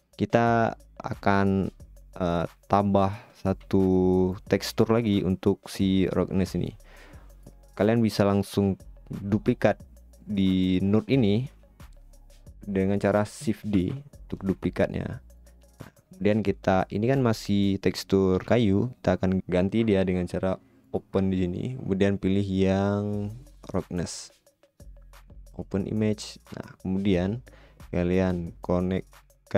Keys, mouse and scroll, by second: 15.9 middle click.